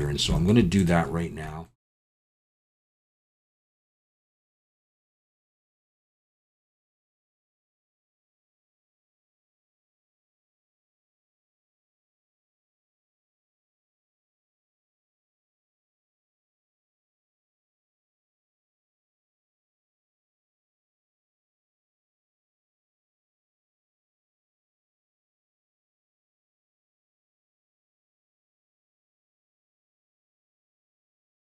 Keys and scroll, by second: 1.8 Tab, 2.0 alt+a, 2.1 2, 2.6 shift+s, 2.9 Tab, 3.1 alt+a, 3.8 Tab, 4.6-6.6 typing, 7.0 ctrl+r, 7.3 ctrl+b, 8.4 alt+a, 8.9-12.1 typing, 9.1 Escape, 11.5 alt+n, 11.8 alt+a, 13.2 alt+a, 14.4 ctrl+z, 15.4 Tab, 15.5 KP_Decimal, 15.8 Tab, 16.2 ctrl+b, 17.4 alt+shift+a, 20.5 ctrl+b, 20.9 Escape, 21.0 a, 21.4 m, 21.6 alt+a, 21.9 3, 22.7 alt+a, 22.8 2, 25.3 ctrl+b, 26.4 Tab, 26.8 alt+a, 27.2 Tab, 27.3 a, 27.6 s, 27.6 y, 27.9 Tab, 28.2 shift+s, 28.4 Tab, 28.8 alt+a, 30.8 Tab, 30.9 s.